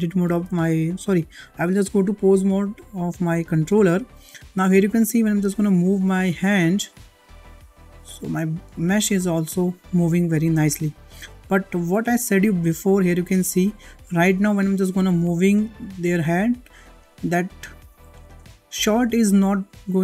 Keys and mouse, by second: 0.2 ctrl+Tab, 3.3 shift+middle drag, 3.8 middle click, 4.3 shift+middle drag, 6.5 click, 7.1 click, 7.5-7.9 middle drag, 8.2 g, 12.6-12.9 shift+middle drag, 13.0-13.6 middle drag, 14.0-14.5 middle drag, 15.3 g, 19.2 g.